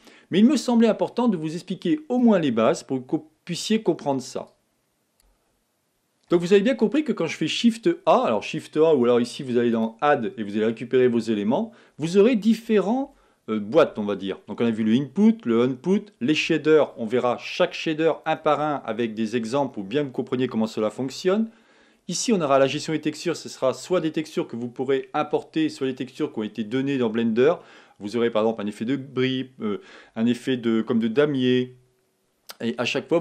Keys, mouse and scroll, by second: 2.3 click, 4.5 click, 5.1 click.